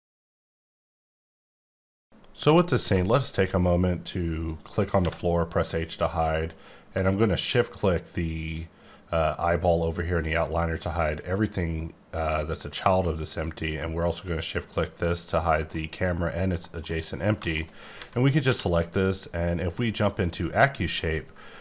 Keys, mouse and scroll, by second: 4.9 h, 7.4 h, 10.2 shift+click, 13.7 shift+Num_Lock, 14.7 shift+click, 15.2 scroll down 1, 15.4 middle click, 16.5 middle click, 16.9-17.4 scroll up 4, 17.4 shift+middle click, 17.9-18.5 typing, 19.9 click, 21.0 middle click.